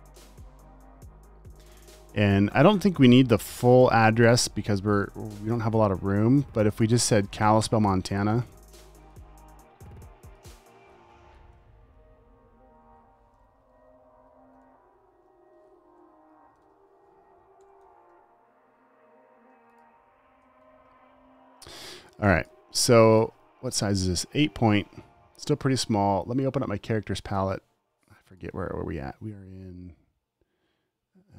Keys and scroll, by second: 0.2 v, 8.7 super+c, 9.9 t, 11.6 Return, 11.8 super+v, 13.1 Left, 14.6-18.1 typing, 16.1 Right, 19.8 space, 20.3 alt+super+space, 20.9 v, 22.5-23.1 typing, 23.5 super+a.